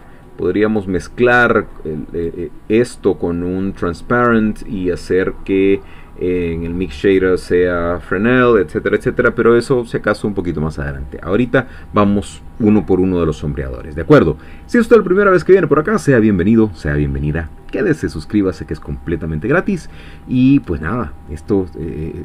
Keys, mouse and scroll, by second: 0.2 click, 1.3 click, 1.7 click, 3.1 click.